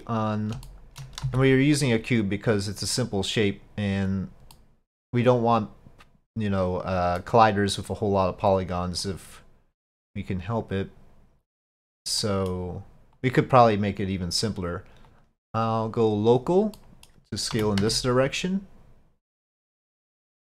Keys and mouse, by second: 0.7 shift+middle click, 1.3 s, 3.1-4.1 drag, 4.6 middle click, 5.6-7.0 drag, 7.2-7.8 middle drag, 9.0 click, 10.2-12.3 drag, 12.3 middle click, 13.3 click, 15.1 click, 15.7-16.6 drag, 16.8-17.2 middle drag, 17.6 s, 20.2-20.5 shift+middle drag.